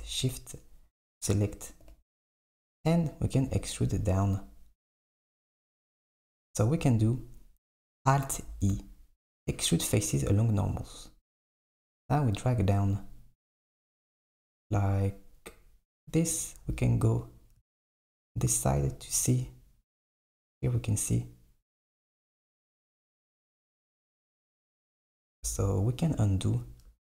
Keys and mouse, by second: 1.9 KP_7, 8.5 alt+e, 16.7 KP_1.